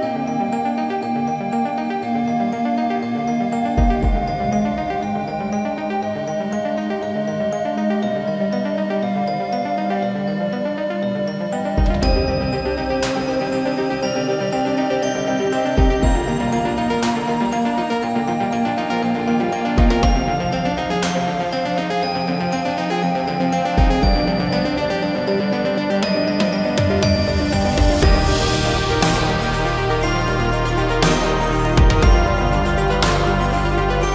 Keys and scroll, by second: 0.5 Delete, 4.5 shift+x, 9.1 Escape, 21.0 Escape, 31.7 Escape, 32.3 Escape.